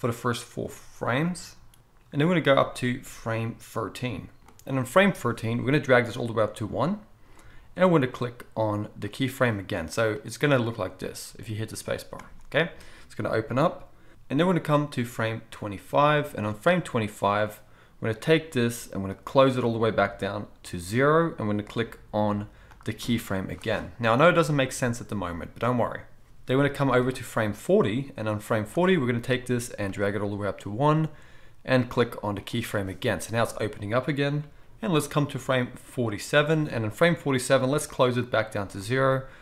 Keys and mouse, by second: 9.2-10.1 middle drag, 10.1-22.8 drag, 11.3 space, 12.2 space, 22.8-27.0 middle drag, 27.0-32.4 drag, 32.4-35.0 middle drag, 35.0-39.4 drag.